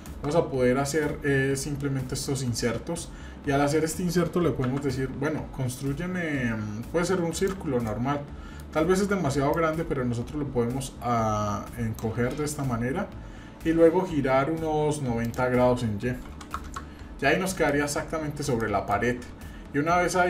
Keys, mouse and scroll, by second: 4.6 shift+a, 7.9 middle click, 9.5-12.0 drag, 12.3 shift+middle click, 12.7-13.3 scroll up 3, 13.3-14.2 scroll down 1, 14.2-15.2 scroll down 1, 15.2-17.2 drag, 17.7-18.5 middle drag, 18.6-19.1 shift+middle drag.